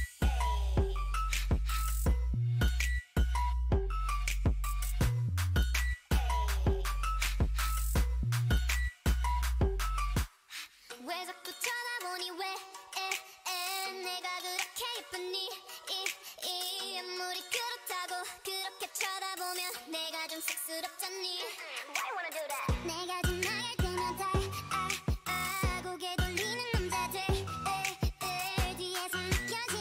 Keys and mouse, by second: 4.8-7.4 right drag, 8.2-9.7 right drag, 8.8 shift+e, 9.4 a, 9.7 middle click, 12.2 ctrl+r, 13.7 g, 17.4 shift+e, 17.9 a, 18.7 right click, 20.0 shift+e, 21.2 Tab, 24.5 Tab, 25.6-26.7 drag, 25.9 s, 26.7 right click, 27.2 click, 27.4 middle click, 28.0 s.